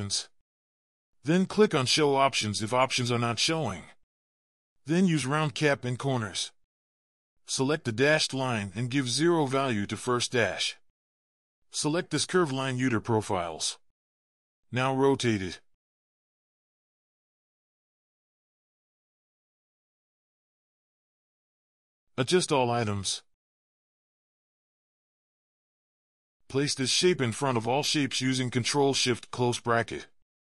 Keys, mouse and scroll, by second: 5.9 double click, 20.7-21.1 ctrl+scroll up 1, 21.6-22.7 scroll up 1, 24.5 ctrl+scroll down 1, 27.3 ctrl+shift+[, 27.5 ctrl+shift+].